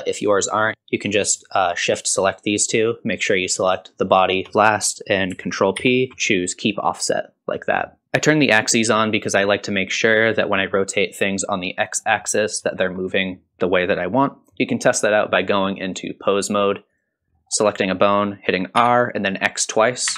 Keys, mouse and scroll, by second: 0.2 click, 1.5 shift+click, 2.2 shift+click, 3.7 shift+click, 5.7 ctrl+z, 5.7 alt+p, 5.7 shift+click, 8.0-8.7 scroll down 2, 10.3 middle click, 12.0 middle click, 12.7 shift+middle click, 13.1 middle click, 15.3-16.3 drag, 16.9 click, 17.4 middle click, 18.0 middle click, 18.8 r.